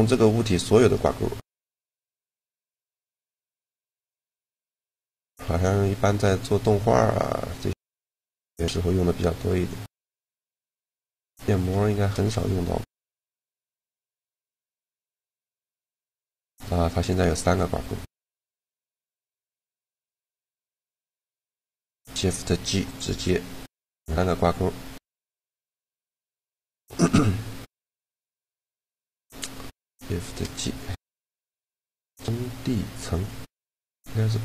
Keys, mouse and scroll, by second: 0.9 g, 2.2 shift+g, 3.6 g, 12.9 Tab, 13.9 click, 14.8 ctrl+h, 17.3 Tab, 18.8-20.5 drag, 19.7 shift+g, 20.6 shift+g, 24.0 g, 29.4 shift+g.